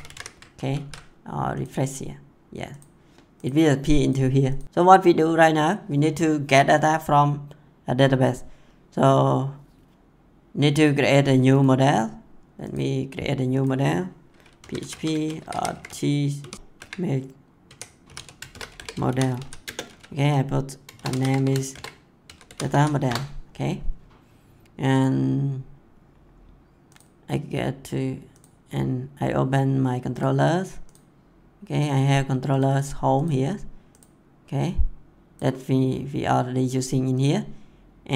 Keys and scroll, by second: 0.5 ctrl+s, 14.3-15.3 typing, 16.4 s, 16.6 BackSpace, 16.7 m, 18.2-19.6 typing, 20.6-22.2 typing, 23.0 Return.